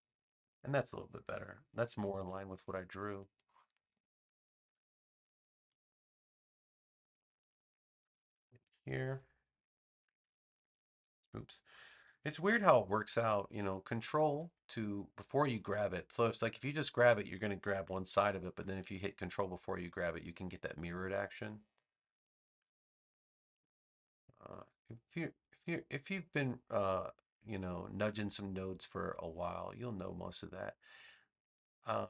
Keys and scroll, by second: 2.0 super+=, 2.9 space, 4.6 a, 18.0 super+z.